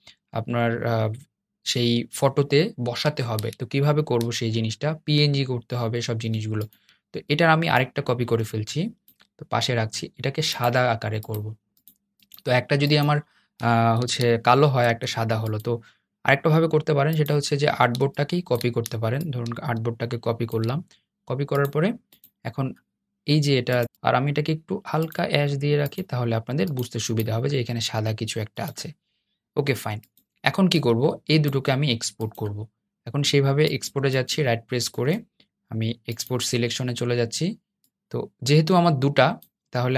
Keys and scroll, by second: 13.7 super+z, 14.6 super+z, 17.3 shift+o.